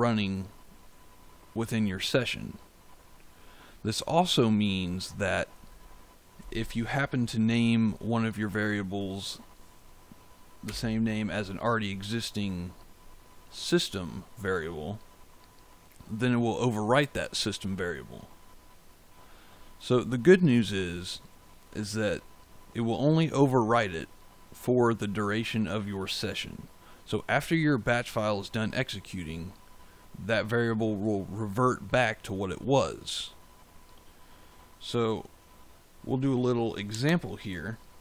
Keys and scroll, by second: 10.6 BackSpace.